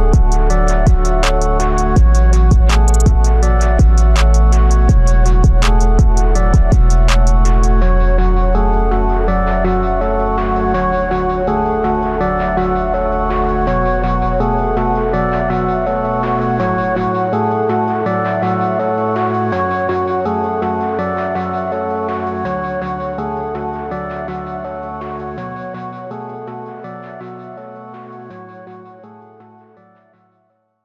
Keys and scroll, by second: 10.1 x, 23.5 x, 24.5 x.